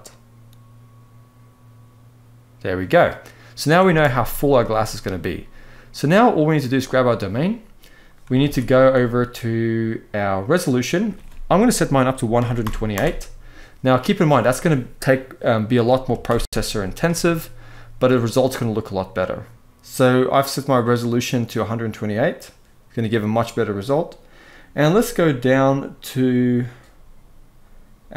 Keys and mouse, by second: 3.6 space, 4.0-4.6 middle drag, 8.2 ctrl+s, 10.4-12.9 drag.